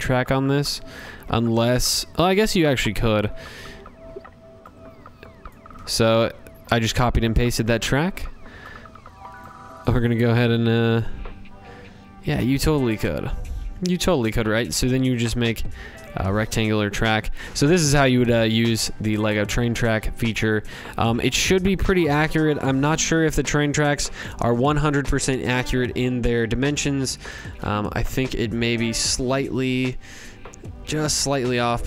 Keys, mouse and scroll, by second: 0.7 click, 1.6 click, 2.1 ctrl+c, 2.6 ctrl+v, 4.4 click, 6.6 click, 8.4 click, 11.4 click, 12.0 Left, 12.2 Left, 12.6 Left, 12.9 Left, 13.3 click, 15.0 click, 15.2 Left, 15.4 Left, 15.6 Left, 15.9 click, 24.1-25.4 drag, 26.3 click, 28.3 Up, 28.7 Up, 29.1 Up, 29.6 Up, 29.6 Left, 29.8 Left, 29.9 Left, 29.9 click, 30.1 Left, 30.4 scroll up 10, 31.1 click.